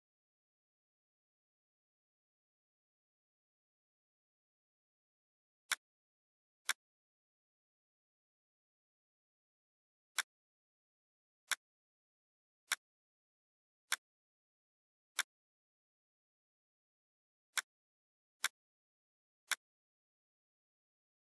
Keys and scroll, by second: 2.2 Left, 2.7 Up, 3.3 Left, 15.9 Delete.